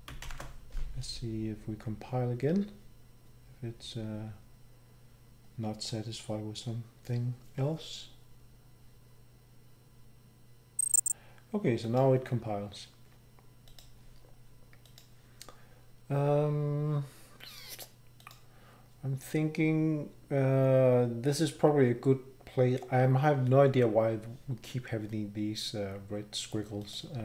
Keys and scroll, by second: 0.2 Up, 0.2 ctrl+shift+b.